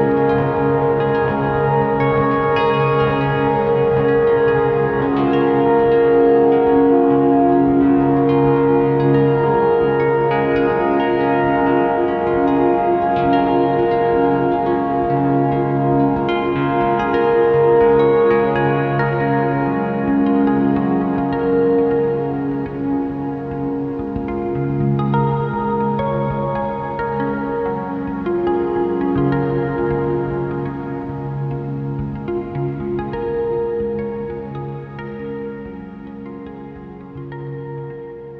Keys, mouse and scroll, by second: 1.3-2.9 drag, 4.1 click, 4.7 click, 6.7 Tab, 6.9 click, 7.4 ctrl+l, 8.0 click, 8.6 Tab, 9.2 click, 11.7 click, 12.7-13.9 drag, 16.9 click, 18.2 Tab, 18.6 click, 18.8 Tab, 20.1 click, 20.4 scroll up 1, 21.6 click, 22.3 scroll down 1, 23.0-23.7 scroll up 1, 23.7 click, 26.3 scroll down 1, 28.4-29.4 drag, 30.3 click, 33.2 alt+a, 37.9 click.